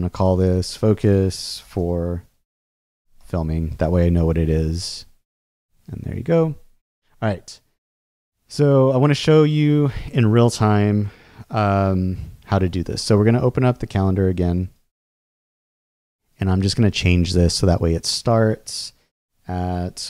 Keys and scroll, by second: 0.0-3.7 typing.